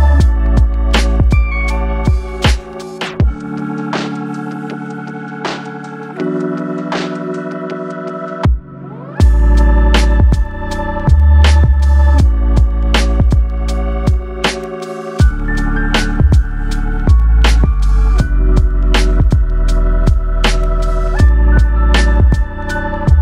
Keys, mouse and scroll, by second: 0.8 click, 1.0 g, 4.1 click, 4.9 g, 6.0 click, 6.6 click, 6.7 g, 7.6 e.